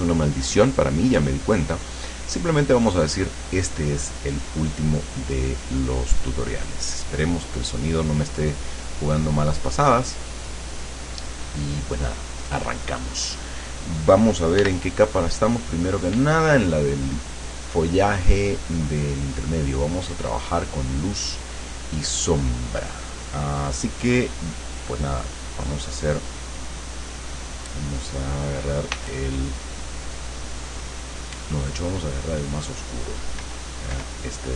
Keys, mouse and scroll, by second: 6.7-11.4 drag, 14.7 l, 18.6-20.2 drag, 20.5 click, 29.0 r, 33.5 r.